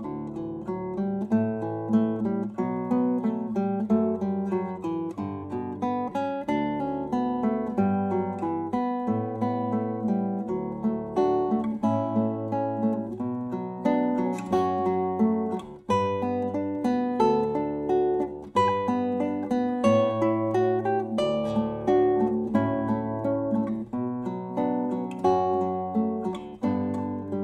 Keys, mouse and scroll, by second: 5.1-8.7 drag, 8.8-10.4 middle drag, 11.4-13.8 drag, 14.0 x, 15.4 ctrl+a, 17.2-19.4 drag, 18.6 shift+a, 23.8-27.4 drag.